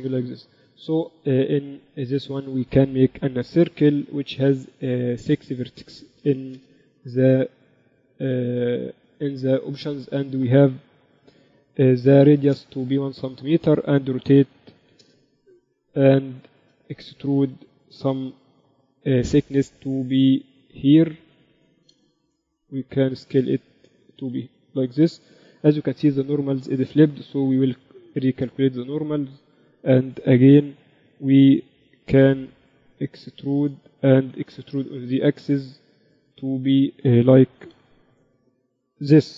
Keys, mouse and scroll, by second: 0.9-2.8 drag, 1.2 shift+a, 4.7 F6, 14.9 r, 16.9 Tab, 17.1 a, 17.3 a, 18.3 e, 21.8 a, 21.9 a, 22.6 s, 25.1 a, 25.7 a, 27.1 a, 28.1-31.3 typing, 28.5 ctrl+n, 32.6 e, 35.1 e, 38.3 e.